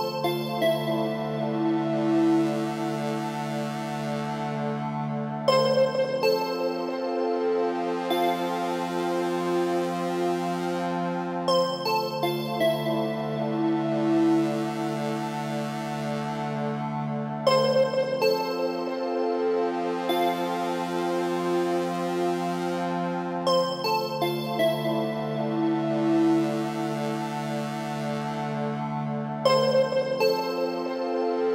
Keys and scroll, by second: 15.4 Left, 29.1 Right.